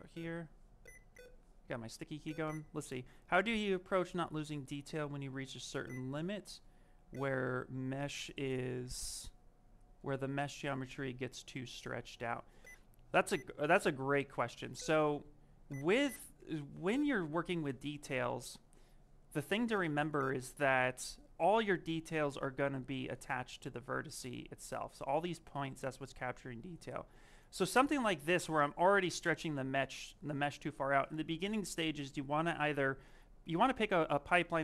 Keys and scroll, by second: 20.1 shift+f.